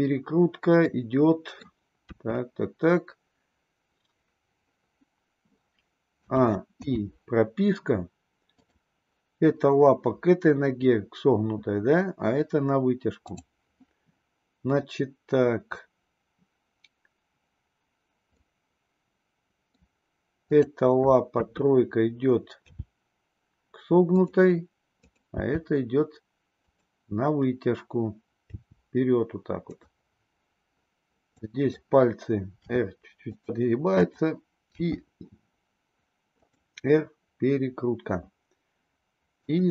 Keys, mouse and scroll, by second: 0.7-1.6 middle drag, 2.0 KP_3, 6.1 a, 6.9 i, 8.5 click, 13.1 click, 18.4-19.7 middle drag, 20.5 click, 21.4 KP_3, 22.6 g, 25.0 click, 25.6 g, 28.4 g, 31.4 click, 32.6 r, 35.2 r, 39.5 click.